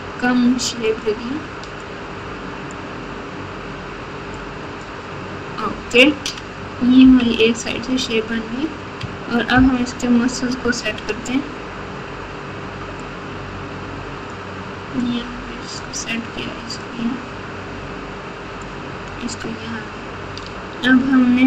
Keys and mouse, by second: 1.9 click, 4.3 click, 7.0 KP_1, 9.5 ctrl+KP_4, 10.1 ctrl+KP_4, 13.0 ctrl+KP_4, 13.0-14.3 drag, 15.0 click, 16.8-18.6 drag.